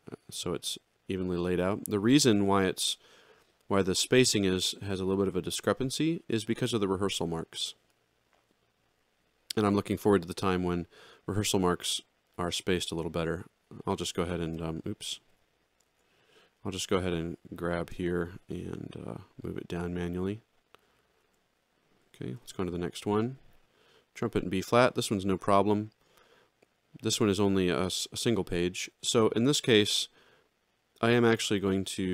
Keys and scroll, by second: 15.3 Escape, 15.8 ctrl+z, 18.8 ctrl+alt+Down, 21.1 ctrl+alt+Down, 22.3 alt+shift+], 23.7 alt+x.